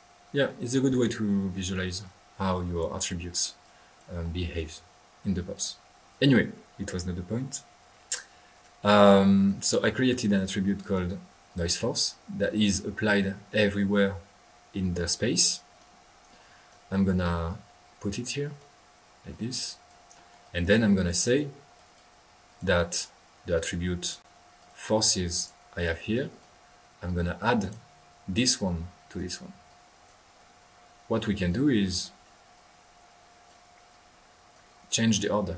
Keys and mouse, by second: 0.5-1.7 middle drag, 2.0-3.1 drag, 3.1 middle click, 3.6 click, 8.5 drag, 9.4 drag, 9.8 click, 9.9 middle click, 10.1 middle click, 10.2 click, 10.8 drag, 11.4-11.8 drag, 12.9 middle click, 13.9 middle click, 15.7 click, 16.4-16.8 drag, 17.5-20.1 drag, 20.1 middle click, 20.4 click, 21.1-21.4 drag, 21.8-22.1 right drag, 22.5 click, 22.9 drag, 24.0 click, 24.6 drag, 24.9 click, 25.0 click, 25.3-26.7 drag, 27.6 drag, 29.0 click, 29.6-30.5 drag, 31.1 click, 32.0-32.4 middle drag, 32.5-35.5 drag.